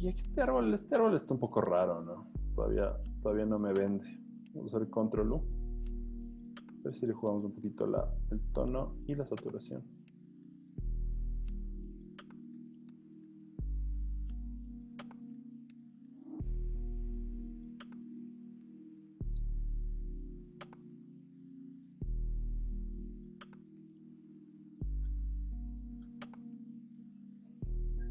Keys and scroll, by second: 4.7 super+u, 20.3-21.4 typing, 27.9 super+t.